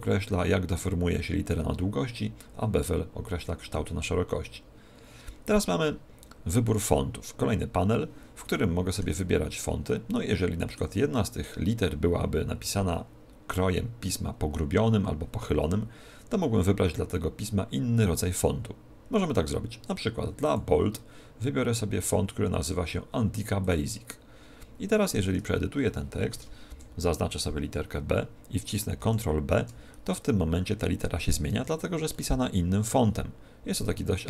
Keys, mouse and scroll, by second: 8.4 middle click, 9.2-10.0 scroll down 7, 9.8 middle click, 11.0 middle click, 20.4 click, 25.2 Tab, 26.6 shift+Left, 28.9 ctrl+b, 31.4 Tab, 32.0 middle click.